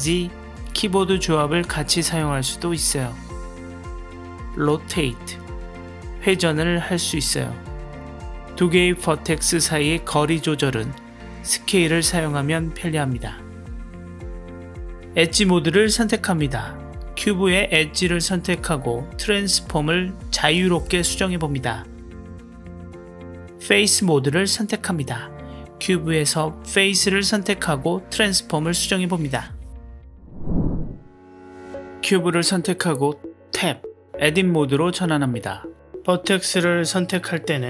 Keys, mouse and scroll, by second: 1.3-3.0 middle drag, 3.4 click, 3.9-4.5 middle drag, 4.7 r, 8.0 middle click, 8.9 click, 9.2 middle click, 9.5 s, 14.2 middle click, 17.0 g, 18.5 r, 21.8 middle click, 22.3 r, 25.4 g, 26.8 r, 28.4 s, 33.5 Tab.